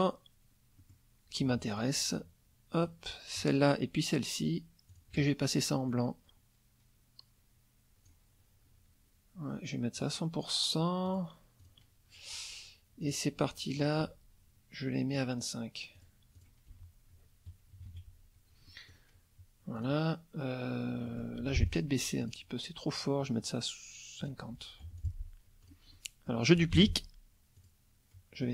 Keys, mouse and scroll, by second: 0.8 middle click, 1.8 click, 4.9 shift+click, 5.9-8.2 drag, 10.0 click, 11.0 click, 11.6 click, 13.0 click, 13.7 shift+click, 15.1 click, 15.9 click, 16.4 click, 16.7 F1, 17.7 KP_Subtract, 18.7 middle click, 19.8 click, 21.0 middle click, 21.4 F2, 21.6 click, 22.2 click, 23.2 click, 24.2 click, 24.8 F1, 25.0 click, 25.6 click, 26.7 ctrl+d, 27.6 click.